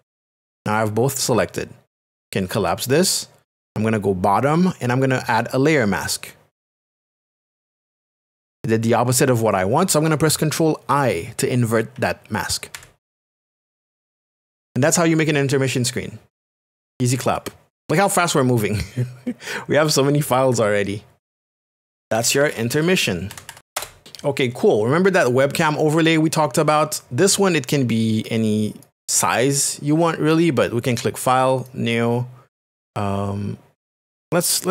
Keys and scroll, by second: 12.7 ctrl+i, 21.8-23.6 typing, 23.7 Return.